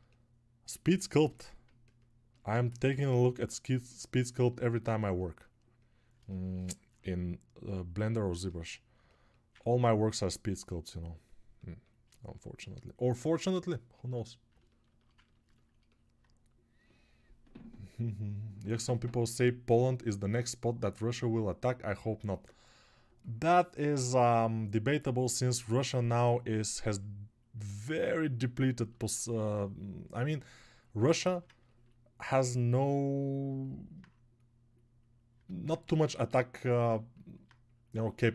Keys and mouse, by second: 6.2-12.7 ctrl+alt+drag, 6.2-12.7 ctrl+alt+right drag.